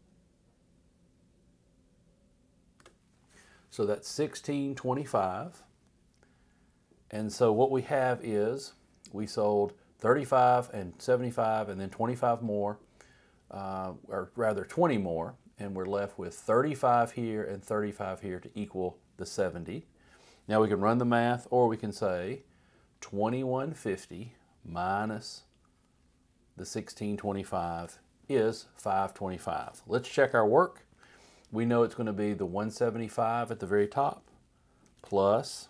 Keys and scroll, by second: 2.8 Return, 21.7 =, 24.8 -, 27.8 Return, 29.9 Up, 31.0 =, 35.0 shift+=.